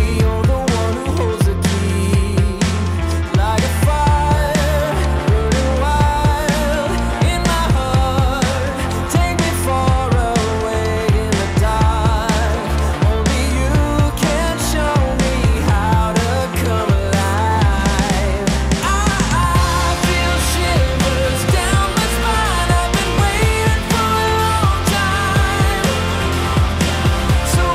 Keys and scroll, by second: 2.2 ctrl+z, 21.5 ctrl+z, 22.7 ctrl+z, 26.3 ctrl+z.